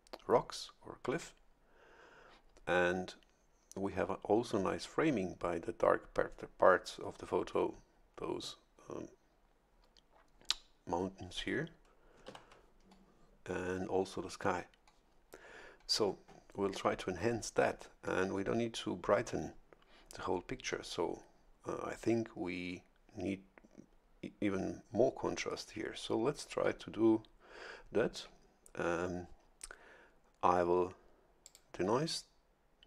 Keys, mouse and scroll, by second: 12.3 shift+F11, 31.4 click.